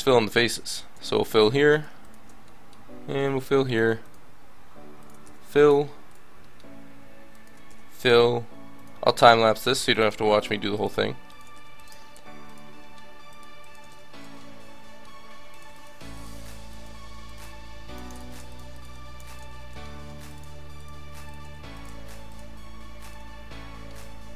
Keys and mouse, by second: 0.9 f, 2.4 click, 3.1 f, 5.2 f, 7.6 f, 9.7 f, 11.5 f, 13.9 f, 14.1 a, 17.0 f, 18.1 ctrl+z, 19.5 f, 21.5 f, 24.0 f.